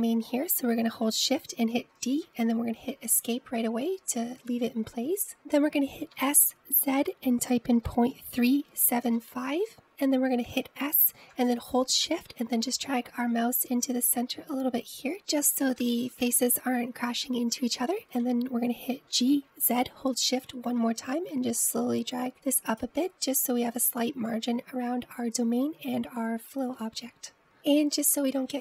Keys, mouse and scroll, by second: 2.9 shift+d, 7.1 s, 10.7-11.0 scroll down 1, 11.0 middle click, 11.7-12.2 scroll up 1, 12.3 s, 17.6-18.7 scroll up 1, 18.7-20.2 middle drag, 20.2 g, 28.4 middle click.